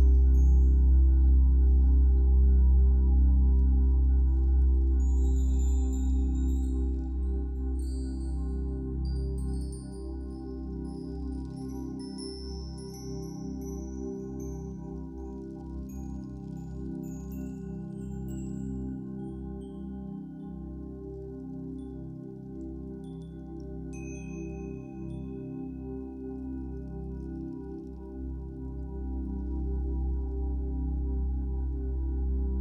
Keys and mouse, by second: 0.5-1.7 drag, 3.2-4.4 drag, 8.1 click, 9.8 ctrl+s, 11.7 click, 12.9-15.0 alt+shift+drag, 16.6-27.5 ctrl+alt+drag, 28.0 ctrl+s, 28.5 ctrl+click, 30.4-32.6 drag.